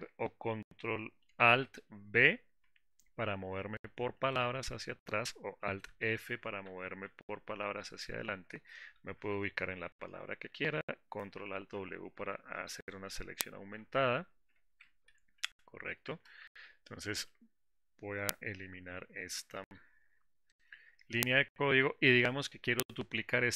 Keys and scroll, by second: 11.8 ctrl+alt+w.